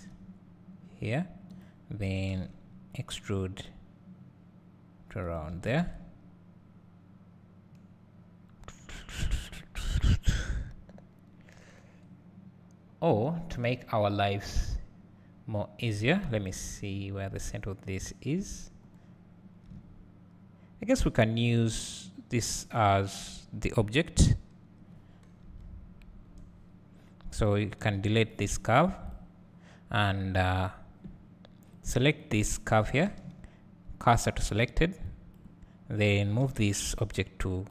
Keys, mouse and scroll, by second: 1.5 g, 2.1 e, 5.8 `, 9.8 KP_7, 10.7-11.5 scroll up 1, 11.5 scroll down 1, 16.5 click, 19.8 `, 25.4 KP_7, 27.5 click, 29.1 click, 31.9 click, 35.3 shift+s.